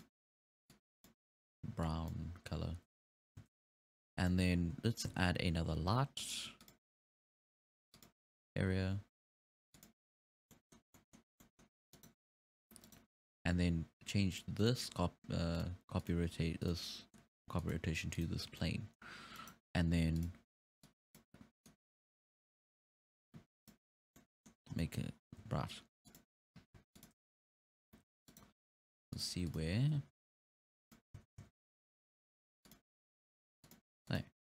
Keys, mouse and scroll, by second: 3.0-3.4 scroll up 5, 3.4 alt+a, 3.8-4.2 scroll down 4, 4.2-5.1 scroll up 2, 4.3 middle click, 5.1 scroll up 4, 5.1 shift+a, 9.3 g, 10.6-10.9 middle drag, 10.9 scroll down 2, 10.9-11.3 middle drag, 11.3 scroll up 1, 11.4-11.9 middle drag, 11.9 right click, 12.8 right click, 14.3 click, 14.6 click, 15.5 click, 16.0-17.8 drag, 18.6 scroll up 1, 18.6-19.4 middle drag, 19.4-19.7 right drag, 20.2 click, 20.9 click, 21.7-24.2 drag, 24.2-24.6 middle drag, 24.6-25.3 scroll up 6, 24.8-25.1 middle drag, 25.4 g, 26.8 g, 27.4 z, 27.9 g, 29.1 click, 29.5 click, 30.0 g, 31.2 z, 31.4 z, 32.0 g, 33.6 click, 34.1 click.